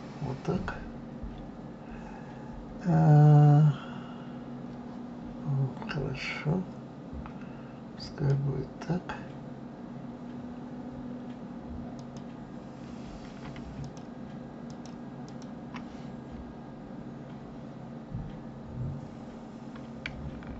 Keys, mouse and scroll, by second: 7.9 click, 11.9 click, 13.8 shift+click, 14.7 shift+click, 15.2 shift+click.